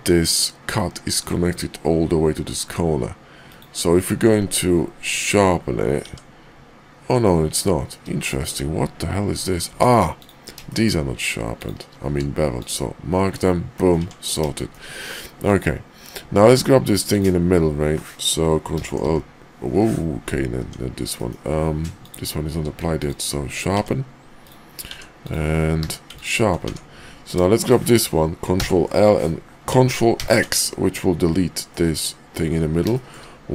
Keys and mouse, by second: 3.4 click, 4.1 q, 6.0 Tab, 7.2 click, 8.2 shift+click, 9.6 Tab, 10.6 shift+middle click, 11.9 q, 13.3 click, 14.0 Tab, 14.5 shift+middle click, 15.4 click, 16.4 Tab, 17.0 click, 18.7 ctrl+l, 19.0 p, 20.6 Tab, 21.0 drag, 22.5 q, 23.7 Tab, 24.4 click, 24.9 Tab, 25.2 click, 25.8 q, 26.6 Tab, 27.2 click, 28.5 ctrl+l, 30.1 ctrl+x, 31.7 middle click, 32.9 shift+middle click.